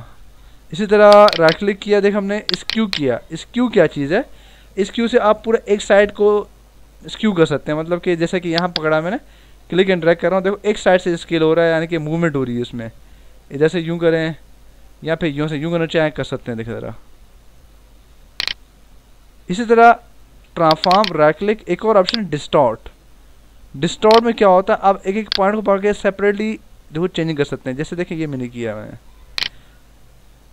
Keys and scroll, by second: 0.8 ctrl+t, 19.5 Return, 20.5 ctrl+t.